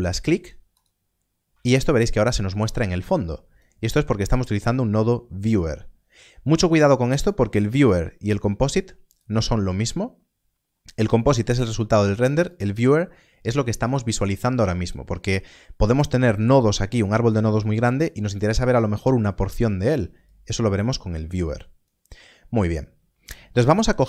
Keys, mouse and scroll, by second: 2.2 click, 7.2 click, 11.0 click, 20.2 click.